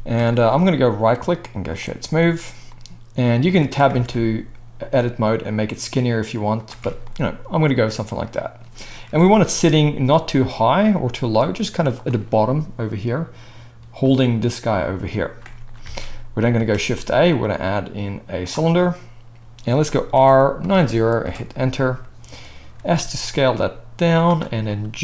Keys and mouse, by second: 0.9-9.6 right drag, 3.4 Tab, 3.9 alt+s, 6.8 Tab, 9.1 KP_1, 9.6-9.9 drag, 9.9-15.8 right drag, 10.0 g, 14.0 click, 14.0 middle click, 15.8 alt+a, 16.5 shift+a, 20.2 r, 22.7 s, 23.8-25.0 middle drag, 24.8 g.